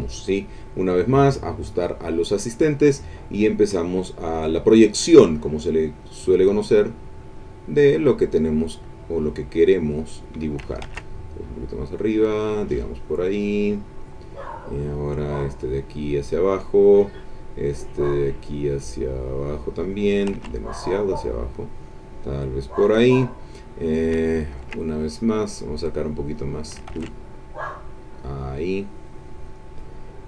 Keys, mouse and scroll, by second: 5.6-7.5 drag, 9.3-10.8 drag, 10.9 ctrl+z, 12.1-14.2 drag, 15.3-17.0 drag, 18.6-20.3 drag, 20.3 ctrl+z, 21.3-23.3 drag, 23.8-24.8 middle drag, 25.9 click, 26.9 ctrl+z, 27.8-29.7 drag.